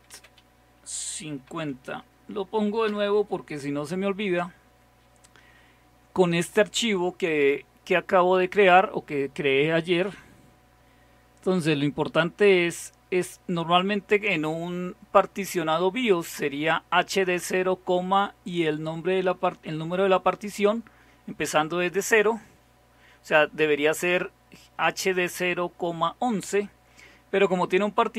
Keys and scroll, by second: 0.0-2.0 typing, 2.9 Return, 4.6-5.3 typing.